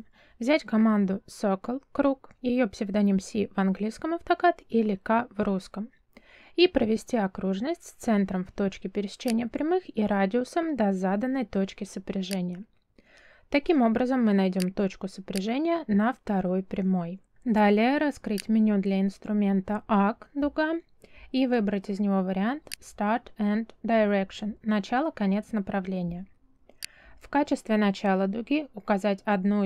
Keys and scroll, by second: 3.5 c, 6.1 space.